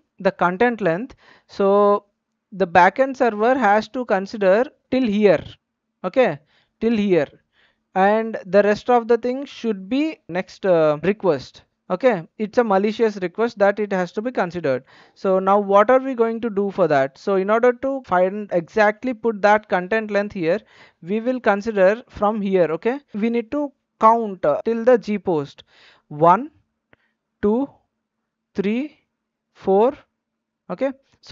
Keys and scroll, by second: 26.0 Tab, 29.4 Right.